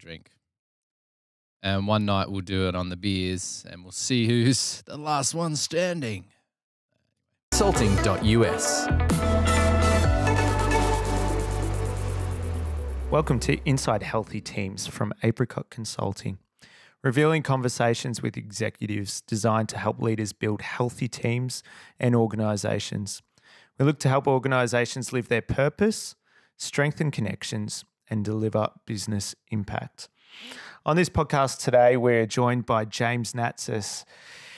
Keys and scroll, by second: 21.5 super+z, 21.5 super+[, 21.7 super+[.